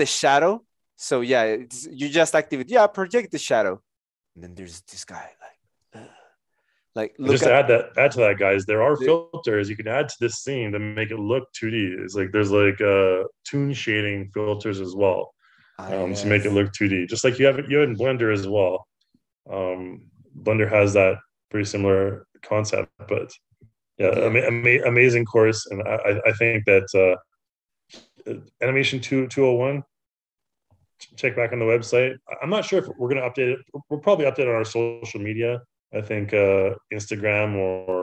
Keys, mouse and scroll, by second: 7.2 Return.